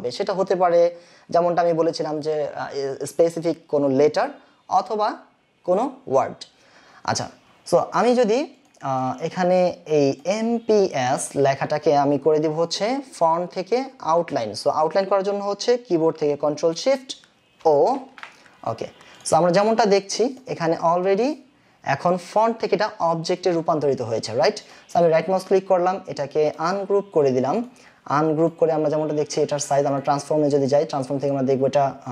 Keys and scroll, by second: 8.4 space, 17.6 ctrl+shift+o.